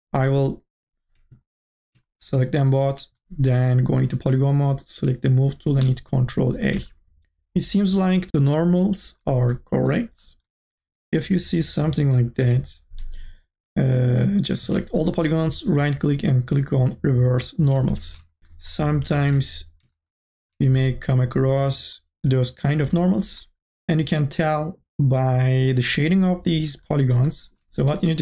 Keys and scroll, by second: 6.7 ctrl+a, 12.3 u, 12.7 r, 15.0 ctrl+a, 22.8 u, 23.2 r.